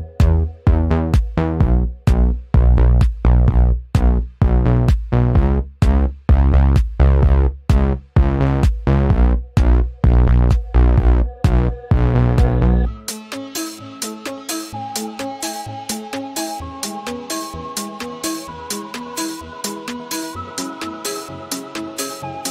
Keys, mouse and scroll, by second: 1.8 click, 3.7-4.8 scroll up 1, 5.1 Return, 5.5-13.6 typing, 14.4 Left, 15.3 Right, 16.1-22.5 typing.